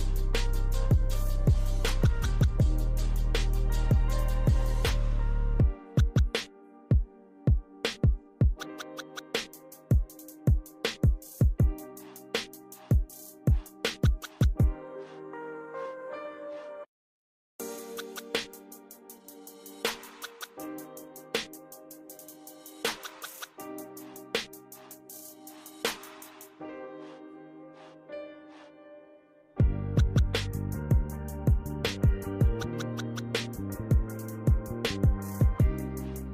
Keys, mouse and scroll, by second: 0.4 Escape, 0.5 Escape, 0.7 middle click, 1.0 middle click, 1.1 Escape, 1.1 click, 1.8 click, 1.9 Escape, 2.5 click, 3.2 ctrl+click, 3.8 click, 4.3 right click, 5.2 click, 5.3 right click, 5.6 click, 5.9 right click, 7.8 Return, 9.7 middle click, 10.6 click, 12.0 click, 13.2 click, 14.8 click, 16.8 click, 18.9 Escape, 19.3 click, 21.2 click, 21.9 click, 22.3 scroll down 1, 22.8 click, 23.3 click, 24.0 scroll up 1, 24.3 scroll down 1, 25.7 click, 27.6 scroll up 1, 29.6 scroll down 1, 33.9 click, 36.2 click.